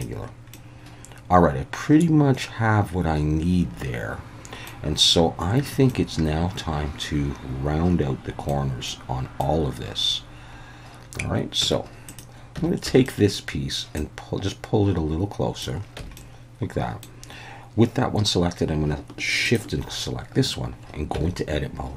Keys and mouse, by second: 0.5-4.7 middle drag, 5.9-8.5 middle drag, 8.9 middle click, 11.6 Tab, 12.1 click, 12.6 Tab, 12.9 a, 13.0 middle click, 14.0-15.6 drag, 16.0 Tab, 16.2-17.0 middle drag, 19.4 shift+click, 21.2 Tab.